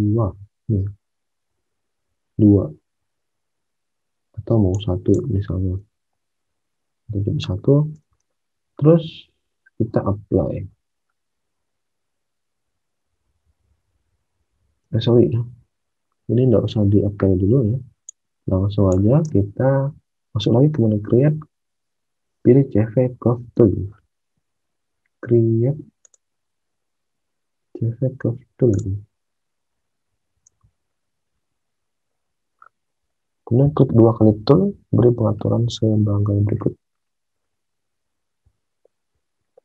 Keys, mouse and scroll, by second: 6.2 BackSpace, 6.4 1, 8.0 alt+Tab, 14.8 alt+Tab, 19.2 alt+Tab, 23.6 alt+Tab, 30.5 alt+Tab.